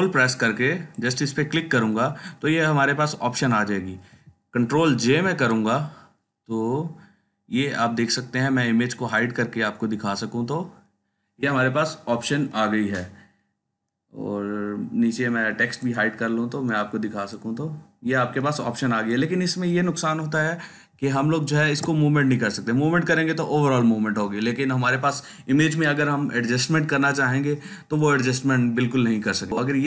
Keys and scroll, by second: 5.1 ctrl+j, 21.5 ctrl+t, 29.5 Delete.